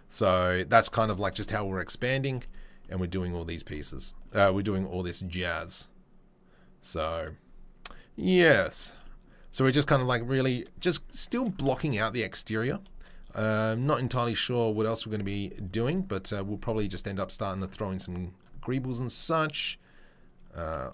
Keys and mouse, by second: 1.3-3.7 right drag, 3.7-4.2 shift+drag, 4.2-8.6 right drag, 8.6 shift+drag, 8.9-10.8 right drag, 10.8-11.4 shift+middle drag, 11.7 shift+middle drag, 12.8 shift+middle drag, 15.6-18.7 middle drag, 16.7 Tab, 18.7 click, 18.9-20.3 middle drag, 20.3-20.9 drag.